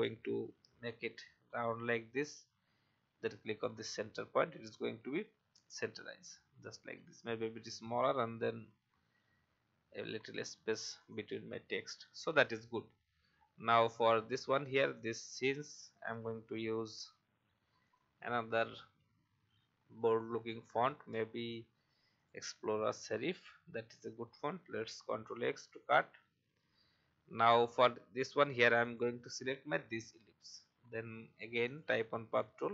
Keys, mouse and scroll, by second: 6.1-8.0 shift+scroll down 1, 8.9 shift+scroll up 1, 11.0 click, 11.9 alt+scroll up 1, 12.8 alt+scroll down 1, 14.0 alt+scroll down 1, 14.9 click, 16.1-16.6 alt+scroll up 1, 17.8 click, 20.3-20.6 typing, 22.1 click, 23.5 alt+scroll up 1, 24.6 ctrl+x, 26.2-26.7 alt+scroll up 1, 28.8 click.